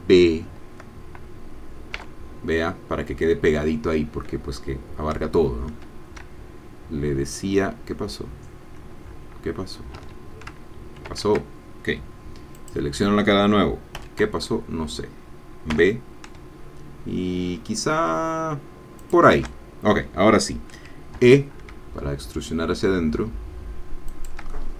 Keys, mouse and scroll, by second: 2.0 b, 10.0 Escape, 11.1 ctrl+z, 12.5-13.9 drag, 13.9 i, 15.7 b, 19.0 shift+click, 21.1 e, 24.1 shift+click, 24.5 shift+middle click.